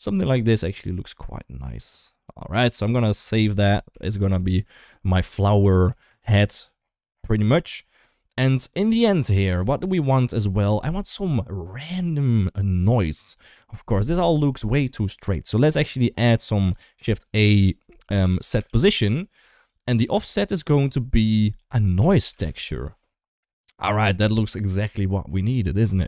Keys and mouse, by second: 0.3-2.6 middle drag, 3.8 ctrl+shift+s, 3.8 shift+middle drag, 4.2-5.4 middle drag, 5.7 shift+middle drag, 7.2 shift+middle click, 8.0 shift+middle click, 9.1-9.4 middle drag, 10.2 shift+middle drag, 14.3 middle drag, 16.4 shift+a, 19.8 middle click, 20.6-23.5 drag.